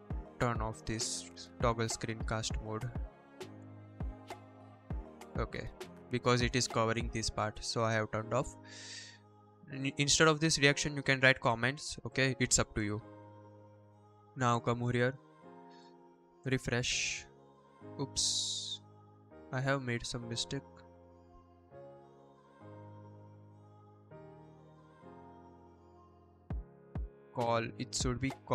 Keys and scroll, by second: 0.7 ctrl+p, 1.1 shift+/, 3.1-4.0 typing.